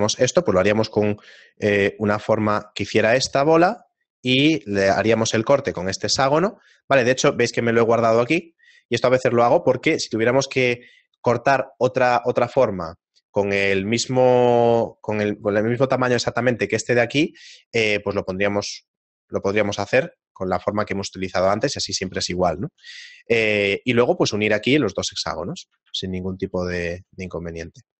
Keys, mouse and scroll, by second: 27.8 middle click.